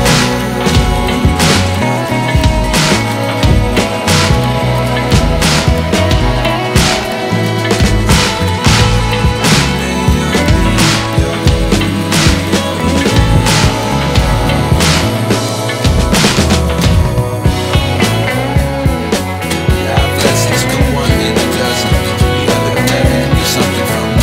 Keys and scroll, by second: 20.9 alt+Tab.